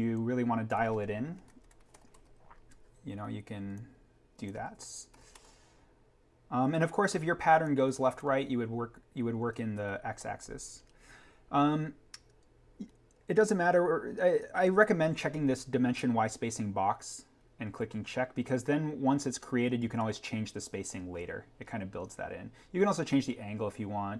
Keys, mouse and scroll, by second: 0.0-0.4 scroll up 1, 1.3 BackSpace, 1.8 3, 2.1 Tab, 3.7 click, 5.1 6, 5.3 Tab, 9.4 7, 9.7 Tab, 10.8-12.6 scroll up 1, 14.6 click, 16.4-18.1 scroll down 1.